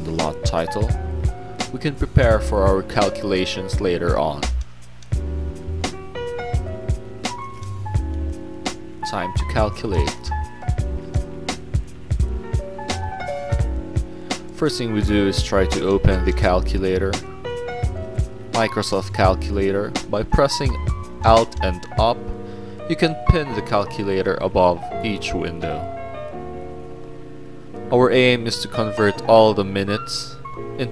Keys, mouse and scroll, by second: 1.1 click, 2.8 middle click, 3.2 click, 6.0 click, 8.6 middle click, 11.1 click, 11.3 click, 11.8 click, 12.8-14.0 drag, 14.6 scroll up 2, 14.9 scroll down 2, 15.1 middle click, 17.6 click, 18.9 click, 22.2 click, 25.9 click, 26.9 Up, 29.9-30.9 drag.